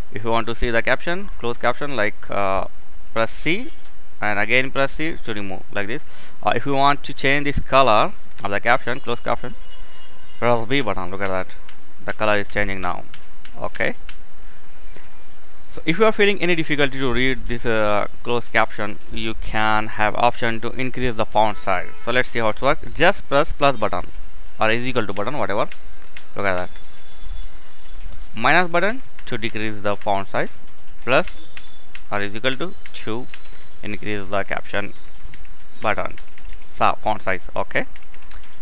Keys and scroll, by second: 3.2 c, 10.5-14.4 typing, 23.2 =, 25.5-26.2 typing, 27.9-29.6 typing, 30.8-38.6 typing.